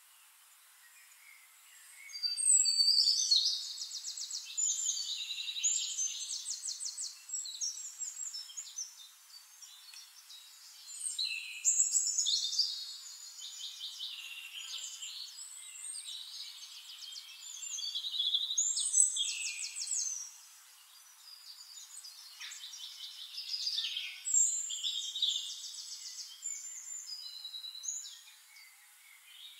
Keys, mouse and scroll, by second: 0.9 click, 4.0 click, 5.7 shift+click, 7.2 click, 8.6 click, 10.0 click, 12.1 click, 13.0 click, 14.9 shift+click, 16.5 click, 17.9 click, 18.6 click, 19.2 click, 20.9 middle click, 20.9-21.5 scroll up 1, 22.6 click, 23.1 click, 24.8 click, 26.6 click, 29.2 click.